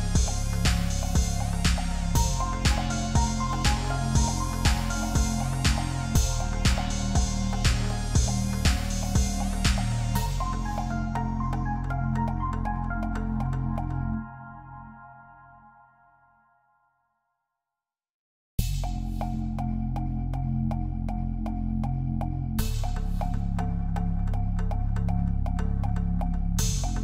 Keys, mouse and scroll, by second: 3.0 Return, 5.0 ctrl+click, 7.1-7.6 ctrl+scroll up 1, 7.8 ctrl+d, 9.0 ctrl+t, 11.1 Return, 14.4 ctrl+t, 23.4 Return, 24.5 ctrl+click.